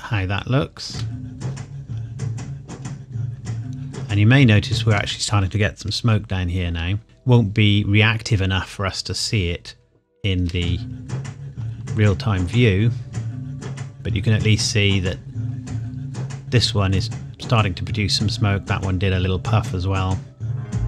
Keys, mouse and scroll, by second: 0.9 space, 5.0 space, 6.0 KP_1, 7.0 click, 10.5 space.